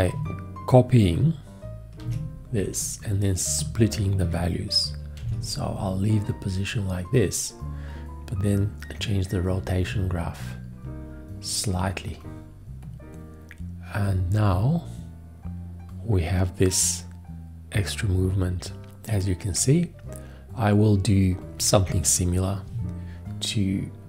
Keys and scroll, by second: 2.0 ctrl+c, 5.2 ctrl+v.